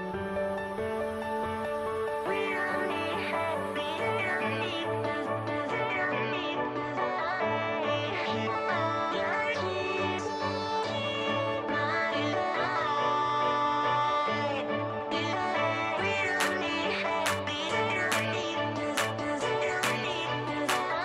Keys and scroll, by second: 0.5-1.8 typing, 11.3 space, 15.2 space.